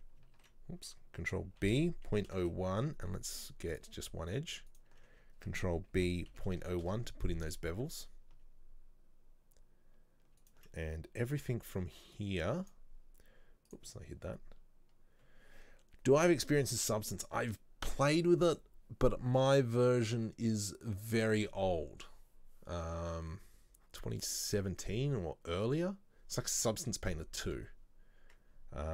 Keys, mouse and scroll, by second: 4.8 alt+right click, 6.0 ctrl+b, 10.5 alt+right click, 12.8 b.